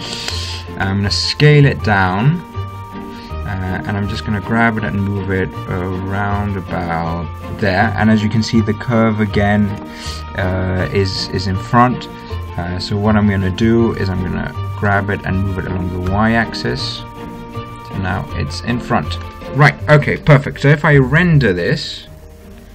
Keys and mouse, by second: 1.8 s, 4.6 g, 9.0-11.0 middle drag, 15.3 g, 19.2-21.6 middle drag, 21.8-22.7 drag.